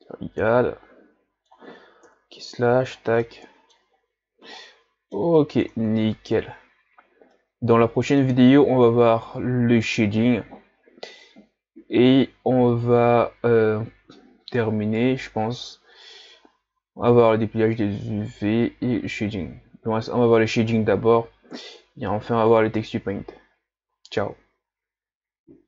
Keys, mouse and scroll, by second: 2.0 KP_Divide, 2.6 a, 2.9 scroll down 5, 3.2-3.9 middle drag, 3.9-4.6 scroll up 1, 4.6-5.8 middle drag, 5.8 ctrl+s, 7.3-10.3 middle drag, 17.6-19.9 scroll up 1, 19.9-20.5 scroll up 1.